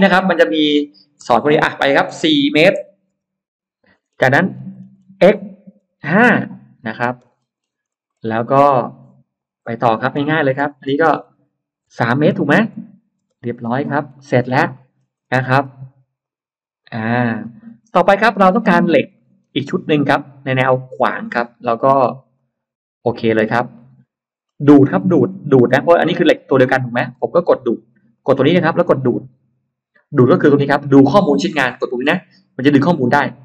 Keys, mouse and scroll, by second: 0.6 click, 0.6 m, 2.6 4, 3.0 Return, 3.9 middle click, 4.3 middle click, 4.8 middle click, 5.1 x, 5.8 5, 6.0 Return, 6.9 Return, 7.0 space, 7.2 scroll down 1, 7.4 space, 7.7-8.4 scroll up 2, 8.8 click, 10.5 click, 10.5 m, 12.2 3, 12.6 Return, 13.2 space, 13.4-14.4 scroll up 2, 13.6 Escape, 14.0 Escape, 14.0 middle click, 14.6 middle click, 15.0-15.7 scroll up 2, 16.1 click, 16.6 click, 16.8 click, 17.3-18.1 scroll up 2, 18.0 middle click, 18.4-19.5 scroll down 4, 19.0 middle click, 20.0 click, 22.2 click, 23.0 scroll down 2, 23.6 middle click, 23.9-24.2 scroll down 1, 24.4-25.8 scroll up 3, 25.8 middle click, 28.0 click, 33.2 click.